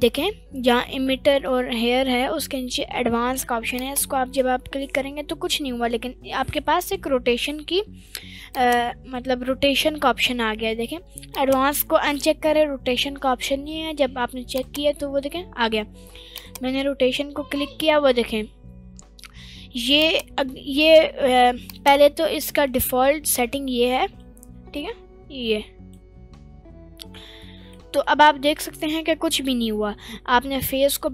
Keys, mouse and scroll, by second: 17.9 middle click, 17.9 click, 19.9-22.2 drag, 23.0-24.2 drag, 24.8-25.9 drag, 27.3 scroll up 1, 27.4 middle click, 27.8-28.5 scroll down 2, 28.1-28.6 middle drag, 30.2-31.1 drag.